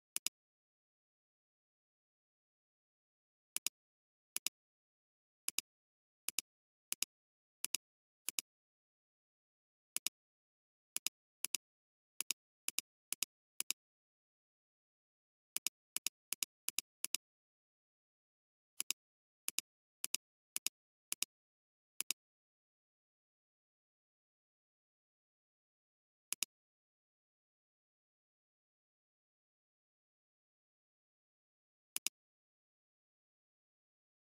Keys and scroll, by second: 2.9 p, 11.5 space, 24.8 ctrl+Return, 30.8 ctrl+alt+d, 31.8 alt+space, 32.6 alt+space.